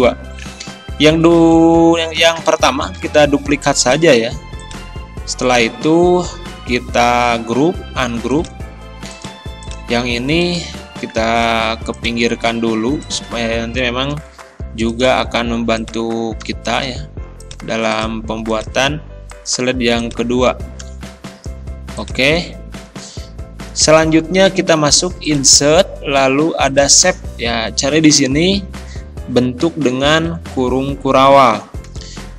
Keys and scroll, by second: 3.0 ctrl+d.